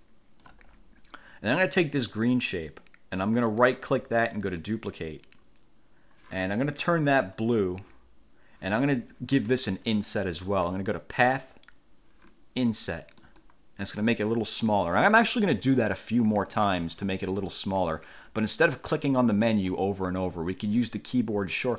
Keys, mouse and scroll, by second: 2.3 click, 3.7 right click, 4.7 click, 7.5 click, 11.4 click, 13.3 click, 19.5 click.